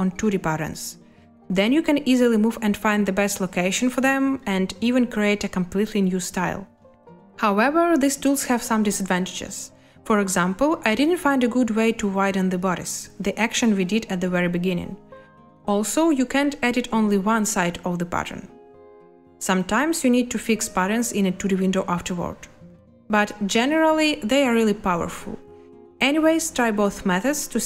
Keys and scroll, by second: 10.4 space, 12.4 space, 19.4 space, 25.0 space.